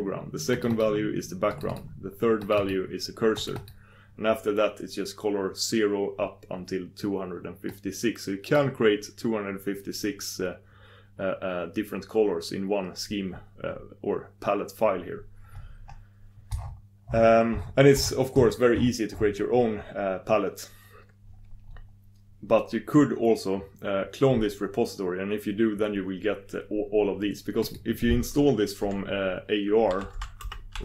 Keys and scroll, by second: 24.5 6.